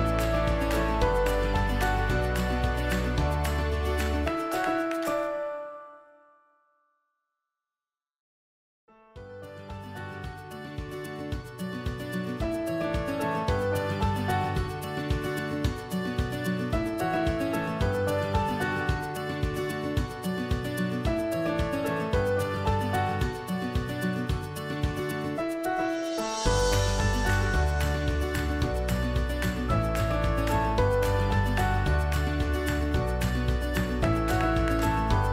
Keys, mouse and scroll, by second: 35.1 alt+shift+click.